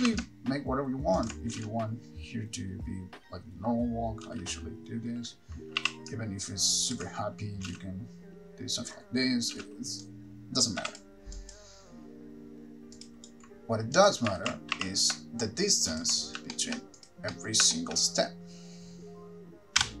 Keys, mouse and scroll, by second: 0.2 r, 1.5 ctrl+click, 1.8 space, 4.5 space, 6.1 r, 7.2 ctrl+click, 7.9 space, 9.7 space, 10.2 click, 11.2 x, 11.5 click, 13.3 click, 14.3 click, 14.6 alt+r, 16.2 ctrl+click, 16.7 shift+middle click, 17.2 click, 17.5 middle click, 18.0 shift+middle click.